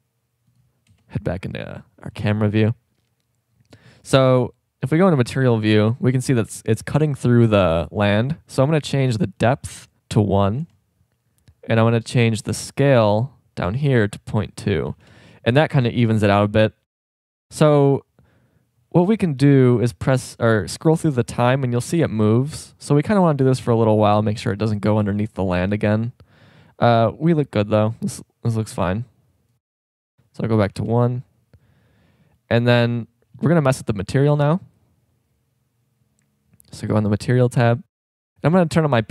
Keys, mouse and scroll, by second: 0.9 KP_0, 9.4-10.6 drag, 14.0-16.6 drag, 16.6-20.6 middle drag, 20.8-22.6 drag, 22.6 middle click, 29.9-31.7 drag, 32.0 middle click, 38.6 middle click.